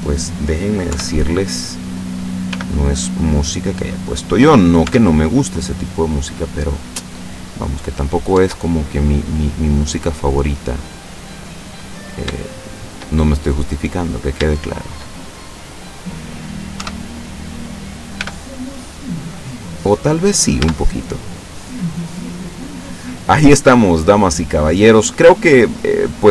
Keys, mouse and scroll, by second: 0.9 KP_7, 2.5 g, 4.3 click, 4.9 Tab, 5.4-5.8 scroll down 1, 6.2-7.8 middle drag, 7.9-8.3 scroll up 1, 8.4 Tab, 9.1-10.7 middle drag, 11.1 middle click, 12.1 shift+right click, 12.5 shift+right click, 12.9 shift+right click, 13.3 shift+middle click, 14.1 right click, 14.6 shift+right click, 15.1 shift+scroll down 1, 15.4-16.4 shift+middle drag, 16.8 KP_7, 18.2 g, 20.1 click, 20.6 Tab, 21.1-21.6 scroll down 2, 21.6-24.5 drag, 24.6-26.2 drag.